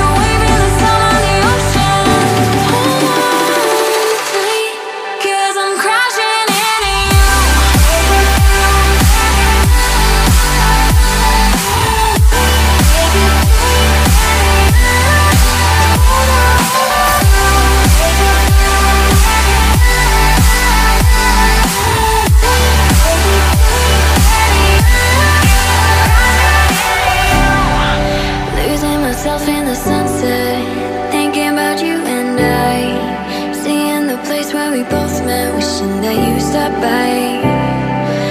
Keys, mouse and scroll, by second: 2.8 ctrl+d, 3.6 ctrl+d, 4.0 ctrl+d, 4.3 ctrl+d, 4.7 ctrl+d, 16.5 double click, 20.0 double click, 21.4 double click, 25.0 double click, 26.4 double click, 29.8 double click, 31.0 double click.